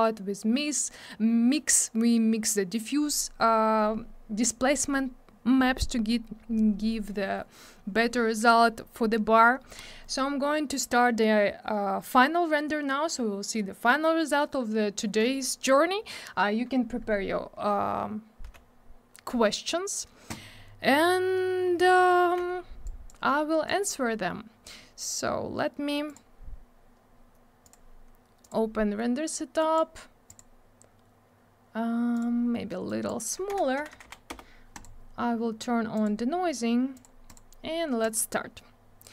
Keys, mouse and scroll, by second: 22.8 click, 23.6 click, 26.1 click, 26.1 click, 27.6 click, 27.7 click, 28.4 click, 28.5 click, 29.6 click, 29.7 click, 30.3 click, 30.3 click, 32.1 click, 32.2 click, 32.8 click, 33.5 3, 34.3 Return, 34.7 click, 34.8 click, 36.0 click, 36.0 click, 36.9 click, 37.0 click, 37.2 click, 37.3 double click, 38.0 click, 38.1 click, 39.0 click.